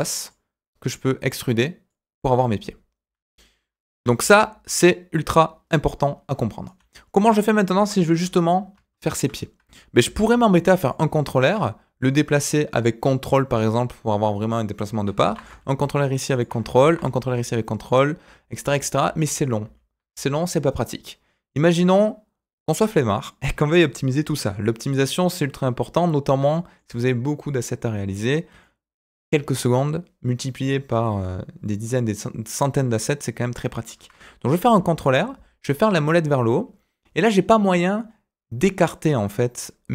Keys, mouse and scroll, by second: 0.0-3.0 typing, 0.8 click, 1.8 click, 4.0-4.8 typing, 4.3 scroll down 2, 4.9-6.6 right drag, 6.6 d, 6.7 d, 6.9-8.1 scroll up 2, 7.1 middle click, 8.1 KP_7, 8.9 shift+middle click, 10.0 ctrl+r, 15.2 ctrl+r, 16.8 ctrl+r, 18.6 ctrl+z, 19.0 ctrl+z, 19.6 ctrl+z, 21.8-23.2 middle drag, 24.3 KP_7, 26.1 scroll up 1, 26.5 shift+middle click, 28.6 shift+middle click, 34.7 ctrl+r.